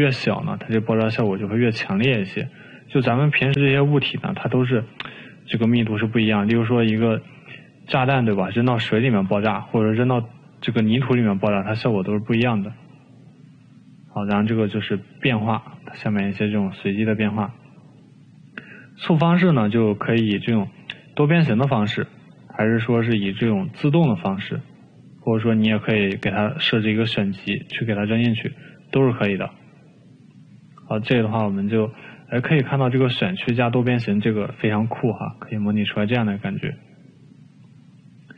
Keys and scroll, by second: 4.5 ctrl+z, 8.3 e, 18.0 ctrl+z.